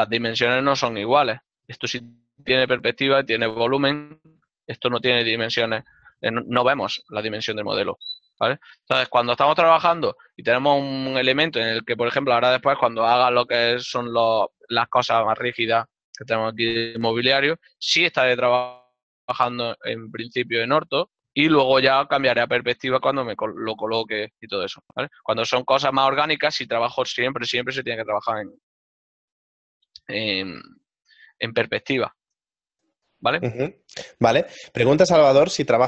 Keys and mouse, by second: 1.1 5.